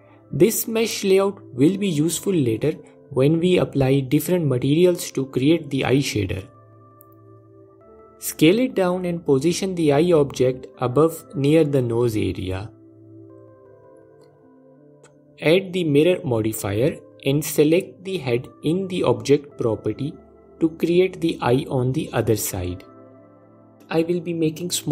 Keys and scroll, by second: 2.4 s, 6.7 s, 11.3 F4.